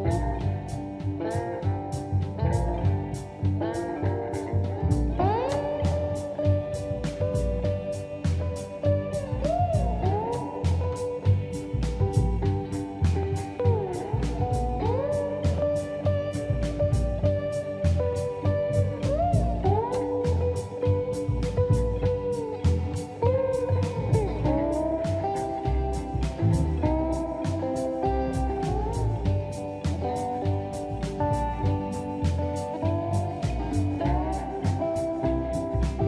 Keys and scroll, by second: 0.7-2.4 typing, 2.4 Escape, 2.6 Escape, 3.5 space, 3.5 Escape, 9.9 ctrl+shift+g, 11.9 ctrl+c, 14.0 ctrl+shift+v, 18.5 Escape, 18.5 space, 25.4 ctrl+c, 25.4 Escape, 25.6 Escape, 25.7 Escape, 26.8 ctrl+v, 28.5 space, 29.2 Escape, 30.0 ctrl+c.